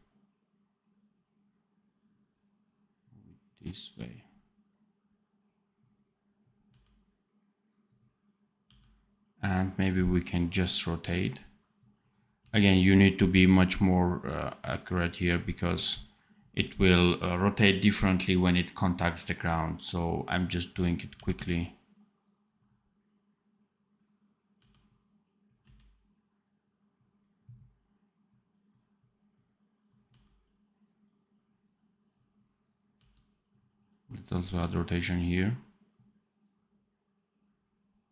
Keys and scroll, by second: 6.6 d, 12.3 c, 21.1 d, 24.5 d, 25.5 c, 30.0 d, 32.9 d.